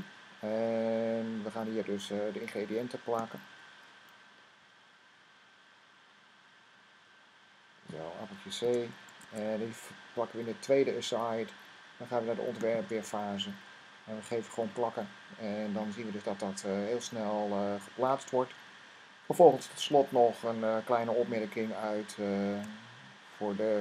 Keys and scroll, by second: 8.6 c, 9.2 Tab, 14.5 v, 22.4 Tab.